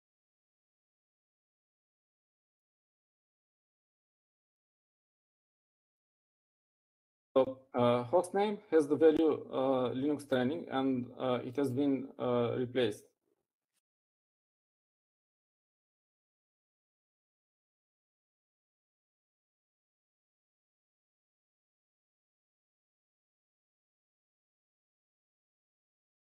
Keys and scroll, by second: 2.4-4.8 typing, 4.9 Up, 5.4 Up, 6.4-7.1 typing, 15.4-20.4 typing.